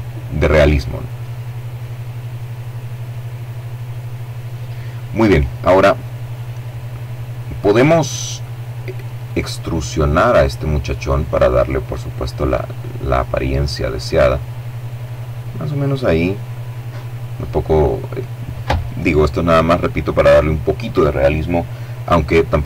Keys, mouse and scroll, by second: 8.1-10.9 drag, 11.2 click, 14.9-16.5 middle drag, 16.5-17.1 scroll down 1.